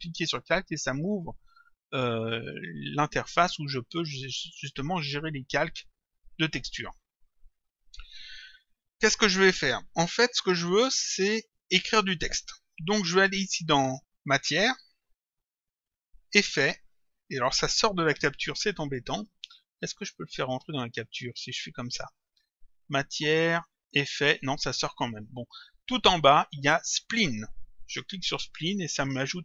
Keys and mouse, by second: 0.4 click, 4.4 click, 6.2 click, 14.3 click, 19.1 click, 22.4 click, 28.2 click.